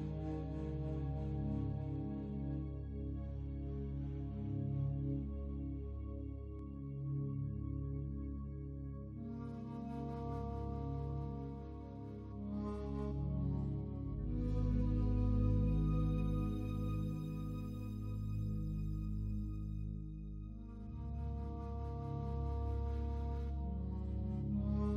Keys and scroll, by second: 7.2 ctrl+z.